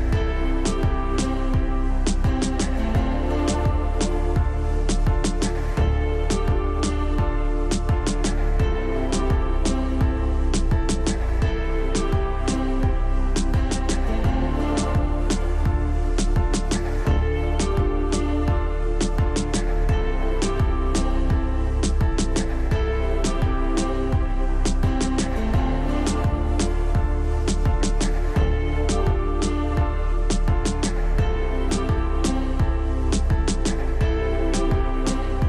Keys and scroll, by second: 6.8 shift+F2, 7.2 Escape, 7.8 F3, 8.2 F2, 10.8 ctrl+q, 16.8 space, 18.3 Escape, 21.0 Escape, 25.4 space, 30.5 shift+F2, 30.9 Escape, 34.3 space, 34.6 F3.